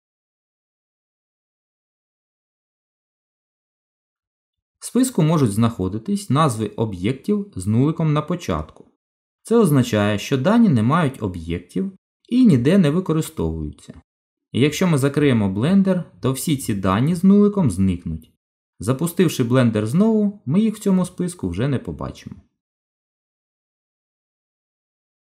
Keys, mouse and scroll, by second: 4.2 Tab, 6.0 click, 24.3 shift+click, 24.6 shift+click.